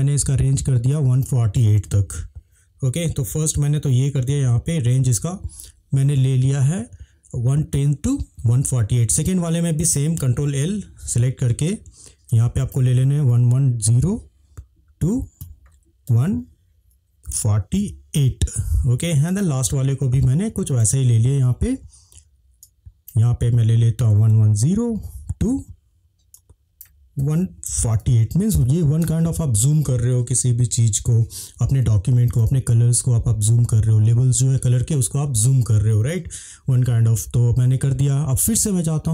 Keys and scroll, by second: 1.8 1, 4.1-5.2 typing, 10.5 ctrl+l, 12.9-14.3 typing, 16.1 1, 17.2 4, 17.8 8, 18.1 Return, 20.9 ctrl+l, 24.2 1, 24.9 0, 27.2 1, 27.9 4, 28.6 8, 29.0 Return.